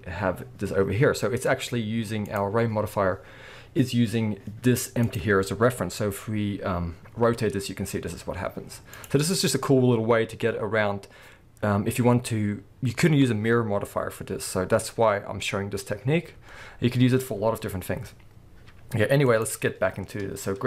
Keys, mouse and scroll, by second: 2.3 click, 5.0 click, 6.0 r, 9.0 right click, 19.3 click.